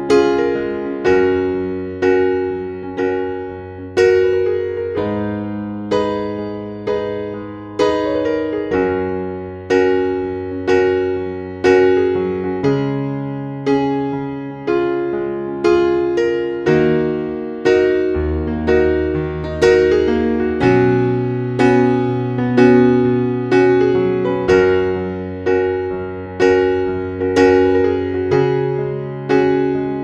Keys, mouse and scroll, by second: 5.1-16.7 drag, 16.7-18.4 scroll up 1, 18.4 click, 19.0 ctrl+a, 19.8 ctrl+x, 21.5 click, 22.4 ctrl+v, 24.0 click, 26.1 ctrl+a, 27.0 KP_5, 29.2-30.0 drag.